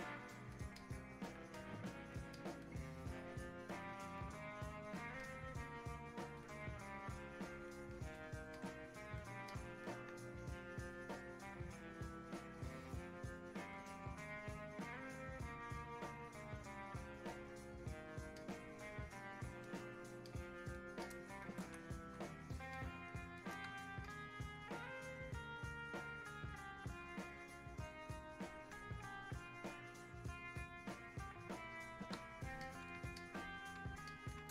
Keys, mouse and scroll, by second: 9.5 alt+click, 10.6-17.6 drag, 18.4-20.3 alt+drag, 20.3 alt+click, 21.1 click, 22.0 alt+click, 22.8-24.1 drag, 24.1-30.9 alt+drag, 30.9-32.7 drag, 32.7 click, 33.2 alt+click.